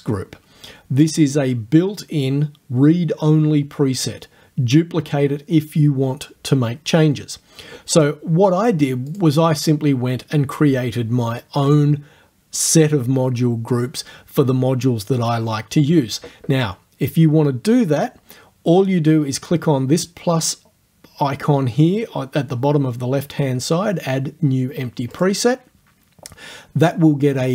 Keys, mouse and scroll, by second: 9.1 click, 25.2 click.